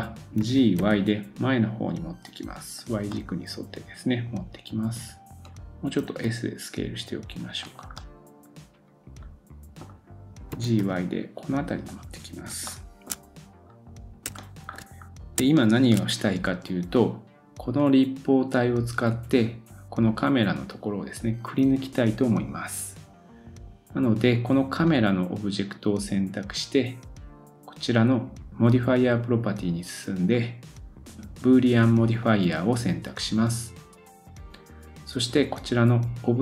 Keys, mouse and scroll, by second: 0.4 g, 3.1 middle click, 6.0 s, 7.9 middle click, 10.5 g, 12.7-13.1 shift+middle drag, 13.7-14.2 scroll down 2, 14.4-14.7 shift+middle drag, 14.7-15.4 shift+scroll up 2, 15.5 shift+middle click, 24.9 click, 28.5 click, 32.7-36.4 drag.